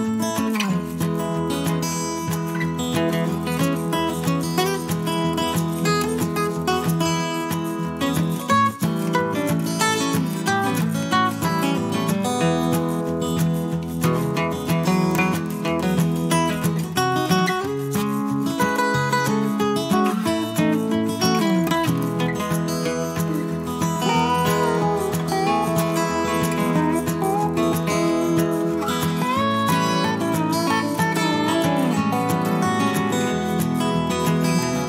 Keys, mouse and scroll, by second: 0.5 click, 1.4 click, 6.2-10.1 typing, 12.4 click, 14.4-16.1 drag, 16.6-18.6 drag, 19.4 click, 20.6-23.2 drag, 23.5 shift+click, 24.7 click, 25.6 click, 26.3 click, 29.3 click, 33.9 click.